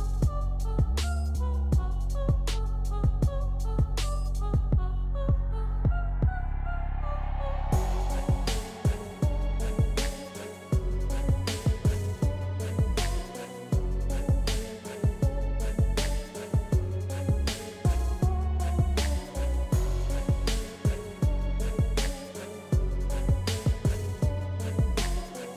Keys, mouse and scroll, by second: 0.8 typing, 1.4-8.0 drag, 8.0 typing, 10.8 click, 10.8 typing, 13.2-20.5 drag, 20.5 scroll down 1, 22.4 click, 23.8 scroll up 1, 24.7-25.5 drag, 24.7 typing.